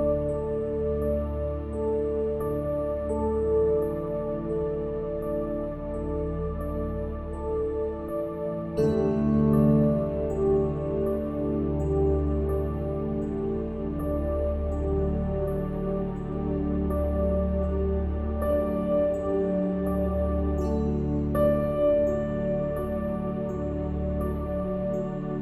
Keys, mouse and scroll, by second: 0.3 e, 0.7-2.0 middle drag, 2.0 click, 3.3 ctrl+b, 5.1 middle click, 5.8 click, 6.0 ctrl+b, 7.4 click, 7.7 Tab, 8.0 middle click, 8.9 Tab, 9.1 middle click, 10.1 ctrl+KP_Add, 11.5 middle click, 11.7 KP_1, 12.2 ctrl+KP_Subtract, 12.5 z, 13.5 p, 14.4 middle click, 15.0 click, 15.4 Tab, 15.5 Tab, 15.8 click, 17.8 click, 18.5 Tab, 18.9 z, 19.2 middle click, 19.8 middle click, 20.3 middle click, 21.0 ctrl+r, 22.0 ctrl+r, 22.8 ctrl+r, 23.8 ctrl+r.